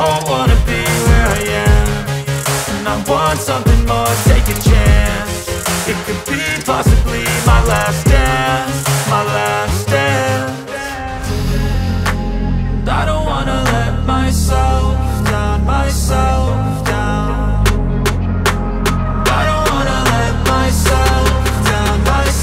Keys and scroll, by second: 0.3 F3, 5.3 F3, 9.8 F2, 11.3 shift+Page_Up, 11.9 Escape, 21.7 Escape.